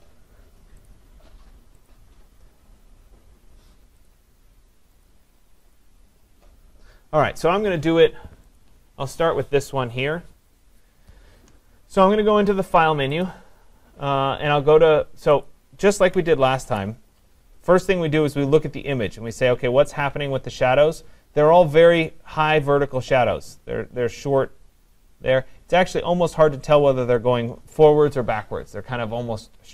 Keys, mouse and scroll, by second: 0.9 click, 1.9 click, 5.1 click, 5.8 click, 8.6 click, 13.2 click, 16.7 ctrl+0.